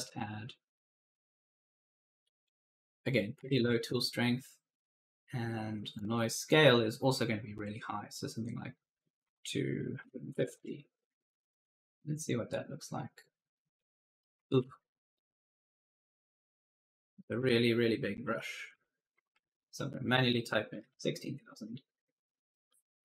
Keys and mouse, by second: 0.8 click, 2.4 click, 3.0-3.8 typing, 5.8 click, 9.1 2, 9.8 5, 10.2 0, 10.4 KP_Enter, 12.1 click, 14.2 right click, 14.2-16.6 typing, 14.7 ctrl+z, 15.0 right click, 16.8 click, 18.3-20.5 typing, 20.7 Return, 22.5 click.